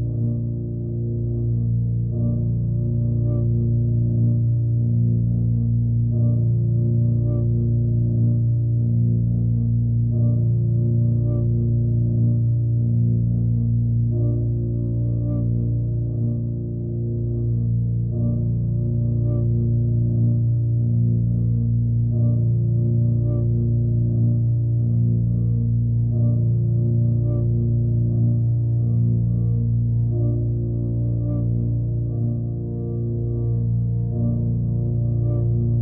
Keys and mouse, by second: 1.1-1.8 drag, 2.7 click, 4.2-5.2 drag, 5.7 click, 6.6-7.7 drag, 9.3-9.9 drag, 10.5 alt+click, 11.9-14.8 drag, 14.8 typing, 19.9 click, 20.6 click, 21.5 click, 23.5 click, 24.3 0, 24.6 Return, 28.4 click, 29.4 KP_5, 29.6 Return, 32.0 click, 32.8 KP_1, 32.9 KP_1, 33.1 Return.